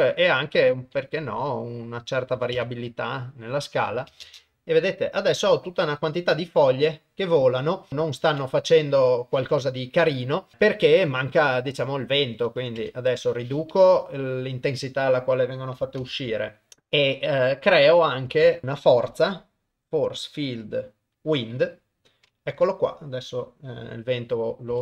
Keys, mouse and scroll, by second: 4.3 shift+space, 7.9 shift+Left, 7.9 shift+space, 8.3 ctrl+s, 9.0 KP_0, 10.5 middle click, 10.9 middle click, 11.6 middle click, 12.4 click, 13.8 middle click, 16.0 shift+s, 18.5 shift+a, 22.2 middle click, 24.7 r.